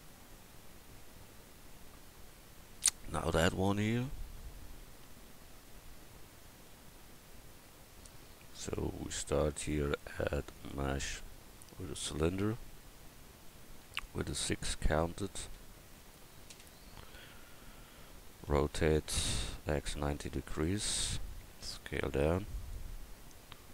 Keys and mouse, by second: 14.0-15.2 drag, 17.9 r, 21.5 s, 23.0 s.